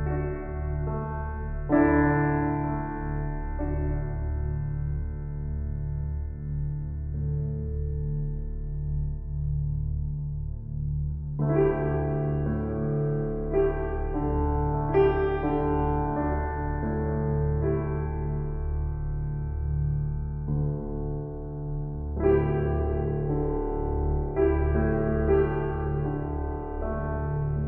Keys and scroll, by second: 2.7 Return.